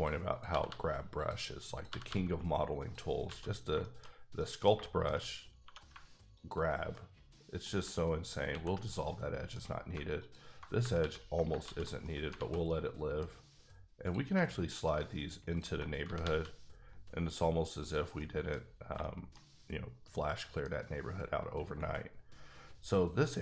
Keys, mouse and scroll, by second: 0.3 click, 0.5 g, 0.7 g, 1.2 click, 1.7 click, 1.9 g, 2.0 g, 2.8 click, 3.3 alt+a, 3.5 scroll down 3, 3.8 shift+middle click, 4.1 scroll down 1, 4.4 middle click, 4.7 shift+middle click, 5.2 scroll up 1, 5.6 2, 6.3 alt+click, 6.9 middle click, 8.5 ctrl+x, 8.9 middle click, 10.2 alt+click, 11.0 ctrl+x, 11.6 ctrl+z, 12.0 middle click, 12.3 alt+a, 12.7 middle click, 14.0 click, 16.0 g, 16.2 g, 17.8 click, 18.2 middle click, 18.4-19.1 typing, 18.6 scroll up 1, 19.0 shift+middle click.